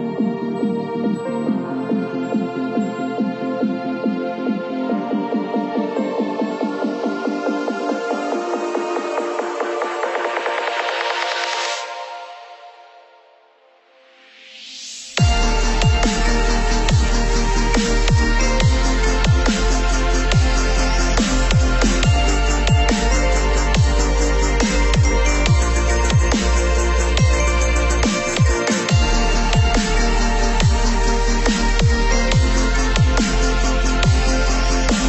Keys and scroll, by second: 0.3-4.2 typing, 1.0 Right, 1.7 Right, 2.4 Right, 3.1 Right, 3.9 Right.